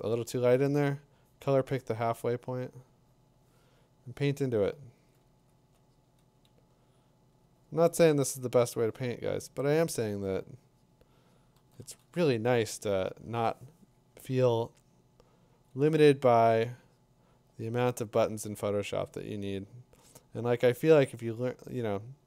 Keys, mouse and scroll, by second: 4.5 click, 5.3 click, 7.4 click, 9.7 click, 15.6 click, 19.1 click, 22.1-22.2 drag.